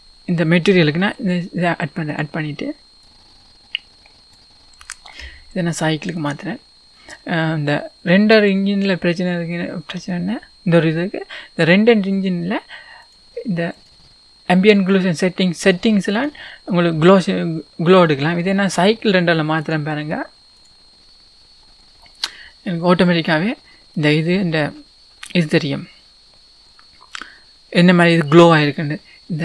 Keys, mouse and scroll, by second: 13.0 click, 13.8 click, 15.6 click, 16.2 click, 18.1-20.8 middle drag, 20.8-23.0 drag, 21.7-23.4 scroll up 4, 23.4 middle click, 23.6 middle click, 23.9 middle click, 24.6-25.3 scroll down 2.